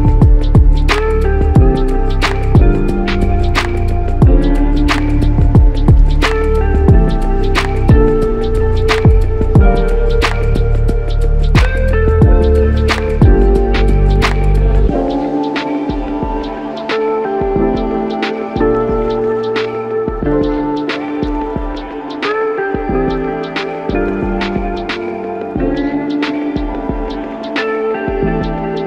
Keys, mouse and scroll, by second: 2.6 alt+shift+click, 4.2 f, 5.5 double click, 12.3 alt+shift+click, 13.6 ctrl+click, 20.4 alt+click, 21.7 alt+shift+click, 24.0 alt+click.